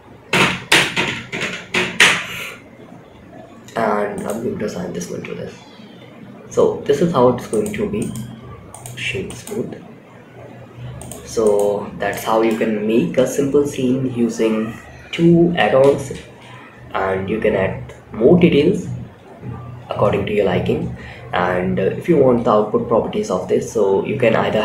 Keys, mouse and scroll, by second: 5.0 scroll up 2, 6.8 click, 6.8 scroll up 1, 7.3-8.2 right drag, 8.2 click, 8.6 click, 9.0-9.6 scroll down 2, 10.3 click, 11.2 scroll down 2, 11.4 shift+scroll up 1, 11.4-11.9 shift+middle drag, 15.4 space, 20.3 space, 21.2-22.0 scroll down 2, 22.0-22.8 scroll down 2.